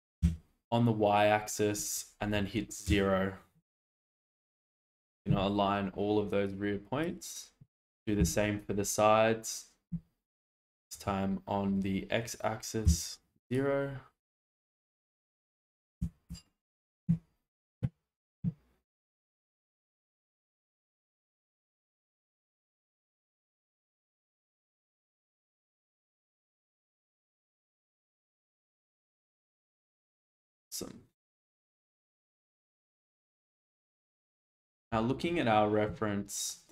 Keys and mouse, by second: 0.2 y, 2.9 0, 6.4 click, 8.2 s, 9.9 z, 10.9 x, 12.8 0, 13.4 click, 14.2 click, 16.0 s, 16.3 x, 16.7 0, 17.0 Return, 20.4 shift+middle click, 21.7 shift+middle click, 23.6 Tab, 25.0-25.6 middle drag, 25.8 shift+middle click, 26.1-26.6 middle drag, 26.8 shift+middle click, 27.7-31.3 middle drag, 32.6 alt+z, 33.1-33.5 middle drag, 34.9 shift+middle click, 36.0 shift+middle click.